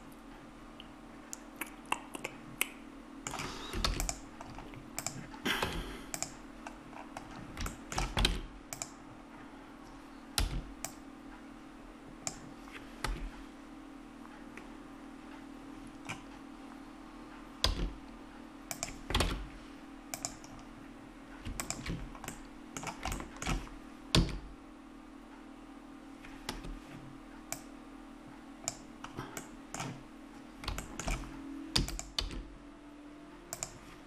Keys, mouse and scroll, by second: 3.8 ctrl+s, 5.1 right click, 5.6 Tab, 7.0 middle click, 8.3 ctrl+Tab, 10.4 c, 17.7 x, 19.3 ctrl+Tab, 22.0-23.4 drag, 24.1 e, 27.6-29.6 drag, 31.7 click, 31.7 e, 32.3 s.